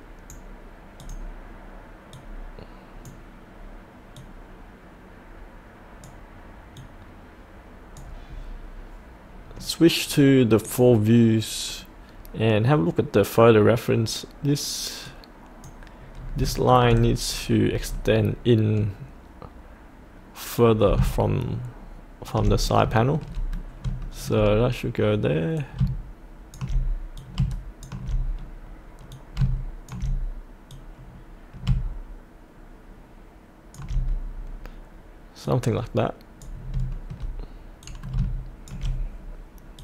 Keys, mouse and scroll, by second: 1.0-8.1 drag, 8.2-10.6 scroll up 1, 10.6 click, 16.2-16.5 scroll up 2, 16.5 shift+middle click, 17.3-20.6 scroll down 1, 20.6 click, 22.6 scroll up 1, 22.9 shift+middle click, 24.0 shift+middle click, 25.5-34.3 drag, 34.3-34.6 scroll down 1, 35.4-36.6 drag, 36.6 scroll up 1, 36.9 shift+middle click, 37.9 click.